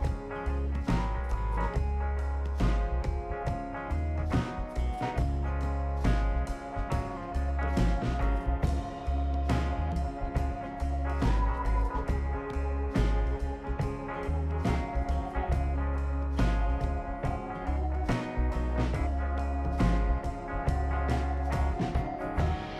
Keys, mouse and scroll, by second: 0.4 F2, 1.0-2.7 typing, 3.9 Return, 6.0 ctrl+d, 8.8 click, 10.9 click, 12.8 click, 15.2 click, 16.8 click, 17.9-18.4 scroll down 3, 18.6 middle click, 18.9-19.6 right drag, 20.5 click, 21.2 space, 22.5 click.